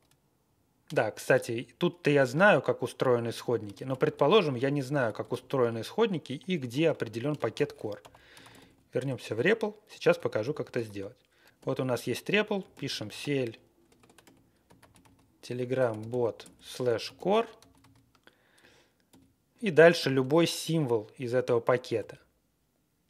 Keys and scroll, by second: 3.7 ctrl+x, 4.6-6.4 typing, 6.7 ctrl+g, 7.3 ctrl+x, 7.7-9.0 typing, 10.1 ctrl+a, 10.4 ctrl+k, 10.7 ctrl+e, 11.5-19.0 typing, 21.9 ctrl+n.